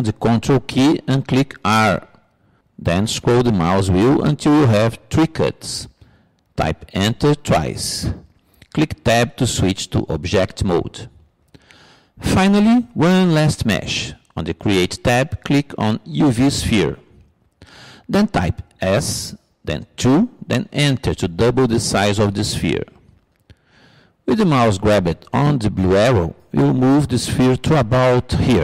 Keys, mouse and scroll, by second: 1.1 ctrl+r, 9.7 Tab, 18.0-19.9 drag, 20.2 s, 26.5-28.3 drag.